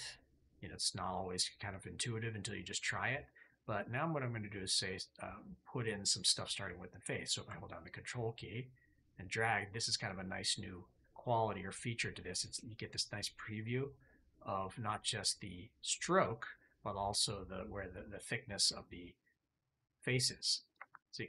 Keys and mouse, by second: 4.6-5.7 drag, 6.3 click.